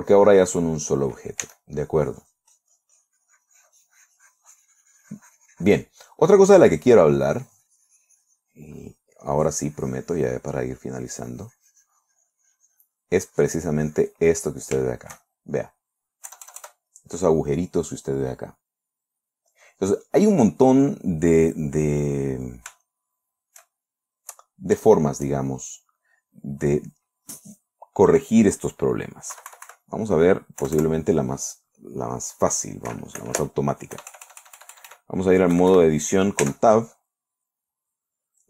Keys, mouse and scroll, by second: 1.9 s, 2.3-6.4 drag, 6.4-6.9 middle drag, 7.0-9.1 drag, 9.1-9.7 middle drag, 11.1-13.6 drag, 13.7-15.2 drag, 15.3-16.2 shift+middle drag, 16.7 KP_Add, 17.4 click, 18.4-22.2 drag, 22.4 click, 23.3 shift+click, 24.6 click, 25.4 shift+click, 29.8 KP_Subtract, 31.1 KP_Add, 32.4 scroll up 2, 32.5 scroll down 2, 32.6 scroll up 2, 32.7-33.2 scroll down 4, 34.4 KP_Add, 36.0 KP_Subtract, 36.9 Tab.